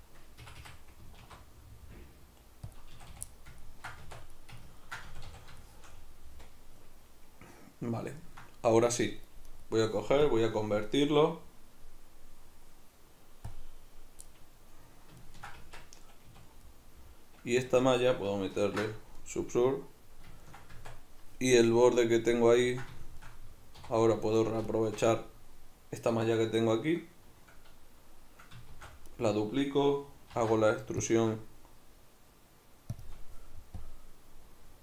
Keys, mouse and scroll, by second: 0.5 Escape, 1.2 alt+s, 2.7 click, 2.9 a, 3.3-9.5 middle drag, 4.0 Tab, 5.1 a, 9.5 right click, 10.2-14.3 drag, 14.3-24.4 middle drag, 15.6 Tab, 16.3 a, 17.7 Tab, 18.6 ctrl+2, 20.8 Tab, 23.8 3, 24.4 alt+right click, 24.7 alt+shift+right click, 28.7 shift+d, 29.2 right click, 30.4 alt+e, 33.0 shift+click, 33.7-34.8 drag.